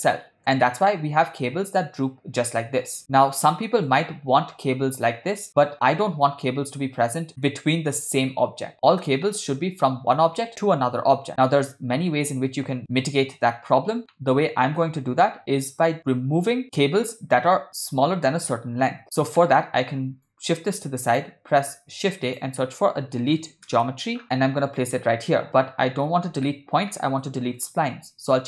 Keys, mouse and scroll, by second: 0.1 middle click, 0.7 shift+middle click, 3.5-3.9 ctrl+middle drag, 7.0 middle drag, 7.4-8.0 shift+middle drag, 9.3-9.6 shift+middle drag, 14.1-15.0 middle drag, 19.0 ctrl+middle click, 19.4 middle click, 20.3-21.2 drag, 21.7 shift+a, 25.9 ctrl+middle click, 26.5 middle click, 27.0 ctrl+middle click, 27.6-28.4 drag.